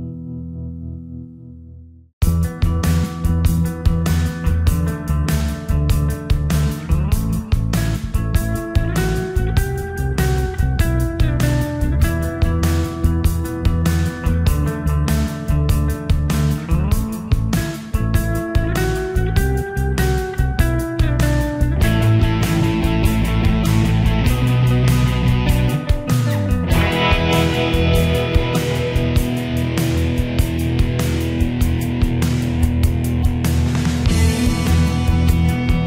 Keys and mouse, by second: 3.8 click, 9.3 click, 34.4 middle click.